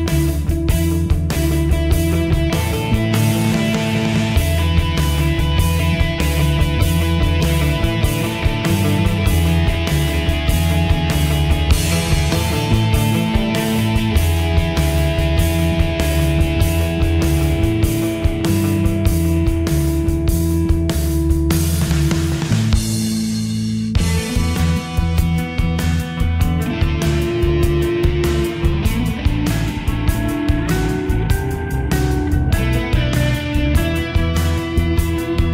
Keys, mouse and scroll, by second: 0.0 ctrl+z, 1.1-4.3 drag, 4.3 ctrl+z, 5.1 click, 6.1 ctrl+r, 10.9 Escape, 11.3 click, 11.6 right click, 13.0 click, 16.0 right click, 17.3-21.4 drag, 21.4 right click, 23.2-32.1 drag, 32.1 right click, 33.3 click, 34.6 right click.